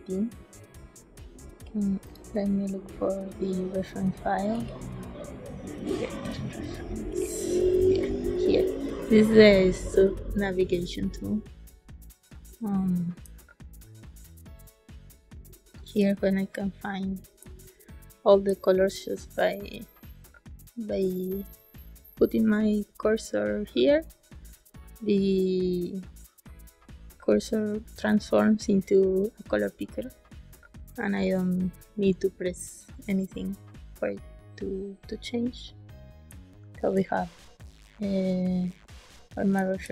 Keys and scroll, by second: 13.2 space, 17.3 space, 36.2 space, 39.5 space.